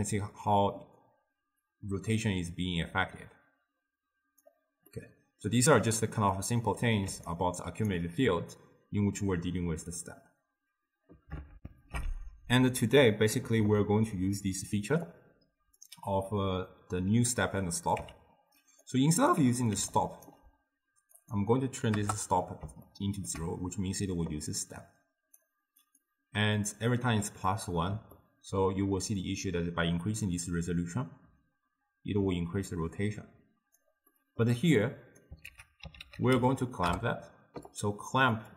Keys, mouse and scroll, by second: 4.9-7.1 middle drag, 7.1 d, 7.3 right click, 8.0 d, 11.6 ctrl+alt+shift+w, 13.3 ctrl+alt+shift+q, 15.1-18.1 drag, 18.1 x, 18.9-19.5 drag, 19.5 x, 19.8 d, 20.0 right click, 20.3 d, 21.2-22.5 drag, 22.5-24.6 middle drag, 24.6 click, 26.1-27.5 drag, 27.5-29.3 middle drag, 29.3-32.3 drag, 34.1-34.9 middle drag, 34.9-35.5 drag, 35.5 ctrl+a, 38.4-38.5 drag.